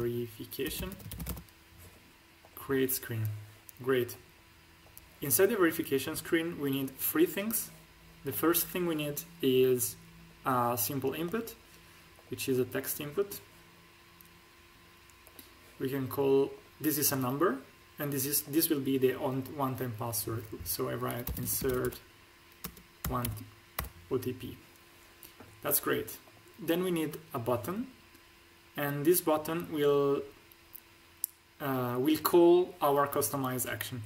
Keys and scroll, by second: 0.0-1.3 typing, 21.2-23.2 typing.